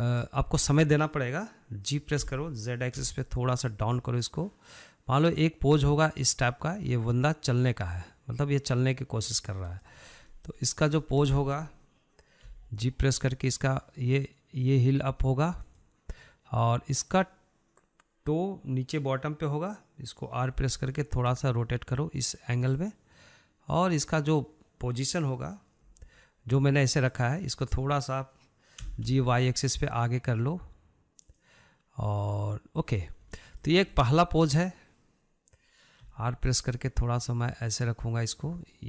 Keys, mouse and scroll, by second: 0.5 drag, 2.4 g, 10.3 scroll up 1, 10.5-11.1 shift+middle drag, 11.1 click, 11.4 scroll down 2, 11.6-12.8 shift+middle drag, 12.8 g, 17.3 drag, 20.9 r, 23.9 drag, 26.1 g, 27.8 click, 29.0 g, 33.6-34.6 shift+middle drag, 34.6 drag, 36.2 r.